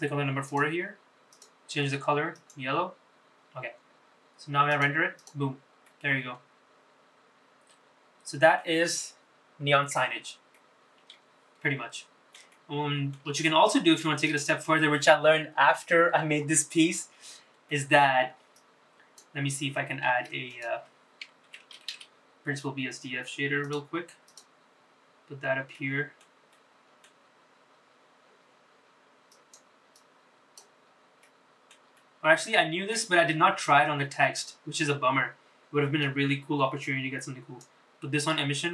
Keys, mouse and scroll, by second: 0.2 click, 1.0 click, 4.4 click, 4.9 click, 5.3 scroll down 2, 5.6-8.3 middle drag, 10.3-12.1 middle drag, 12.3 shift+middle click, 13.1-14.0 scroll up 2, 14.0 click, 16.6-17.4 scroll down 2, 17.4 middle click, 18.3 click, 19.8 shift+a, 25.4-27.6 scroll down 1, 27.6 middle click, 27.6-28.3 scroll down 1, 29.0 click, 29.7 click, 30.3-34.0 middle drag, 34.1-35.7 middle drag, 37.6-38.7 middle drag.